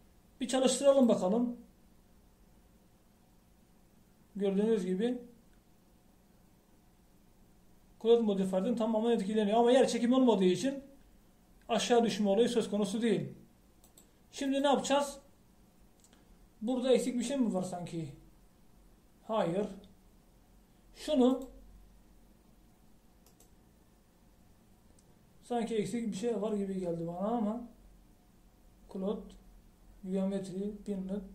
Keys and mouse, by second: 1.9-3.2 drag, 15.0-31.3 drag.